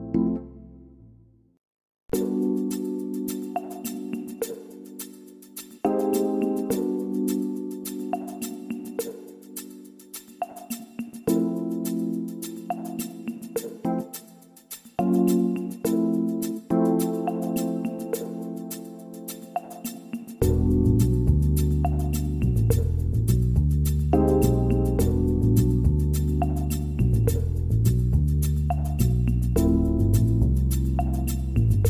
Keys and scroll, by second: 13.7 ctrl+z.